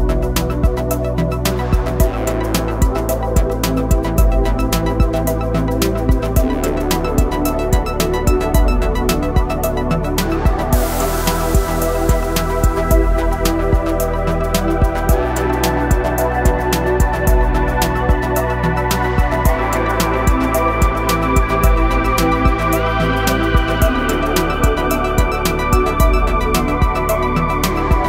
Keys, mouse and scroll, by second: 0.7-6.9 drag, 7.9 click, 9.9 click, 10.5 Left, 10.8 click, 12.1 Left, 13.4 Right, 13.8 Up, 14.4 click, 14.7 m, 16.6 space, 17.1 j, 18.7-21.2 drag, 21.7 Up, 23.6-28.0 drag.